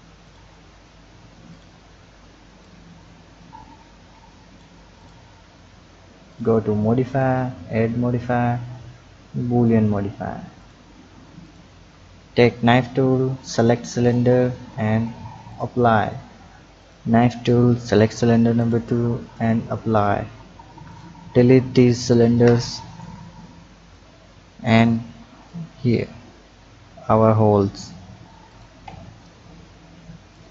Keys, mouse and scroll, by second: 0.2 shift+click, 1.4 click, 2.6-5.0 drag, 6.3 drag, 7.0-10.0 drag, 10.6 click, 11.4 click, 15.4 click, 16.7 click, 19.9 click, 20.8 click, 22.0 shift+click, 23.0 Delete, 24.0 click, 25.2-26.0 scroll up 3, 26.0-26.5 scroll down 2, 27.2 click, 27.7 Tab, 28.4 click, 28.8 Tab, 30.3 click.